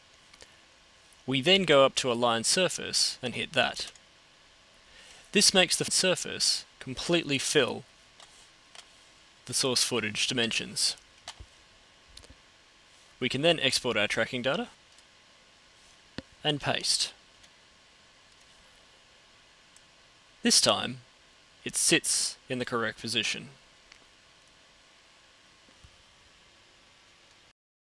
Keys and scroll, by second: 14.7 super+End, 16.8 super+v.